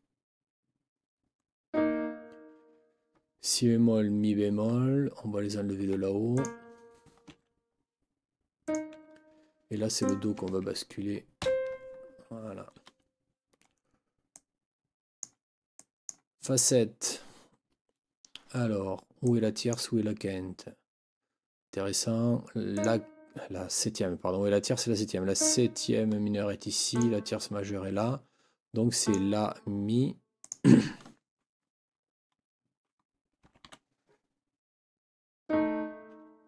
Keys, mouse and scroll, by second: 5.8 Escape, 6.3 click, 7.3 Delete, 8.6 click, 8.9 Delete, 10.0 click, 11.4 ctrl+Up, 14.3-15.4 drag, 15.7-16.3 drag, 19.2 click, 22.7 click, 25.3 click, 26.9 click, 29.0 click, 30.4 click, 33.4 n, 33.6 KP_7.